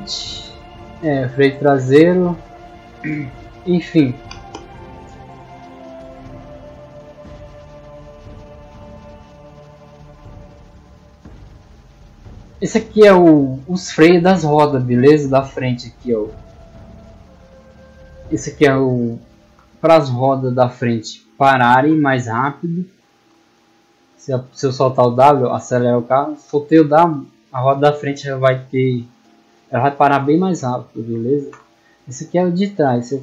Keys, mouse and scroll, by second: 0.7 middle click, 10.1 click, 12.6-12.9 middle drag, 13.0-13.4 scroll down 2, 13.7 middle drag, 14.5 right click, 15.3 right click, 16.0 right click, 16.5 right click, 17.0 right click, 17.7 right click, 20.4 middle click, 21.9-22.8 typing, 24.5 w, 32.2 click.